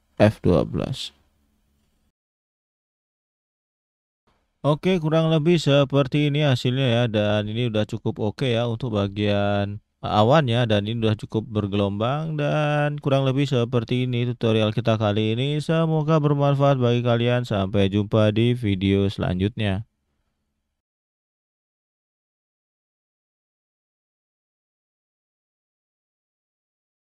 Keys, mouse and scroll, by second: 0.2 F12.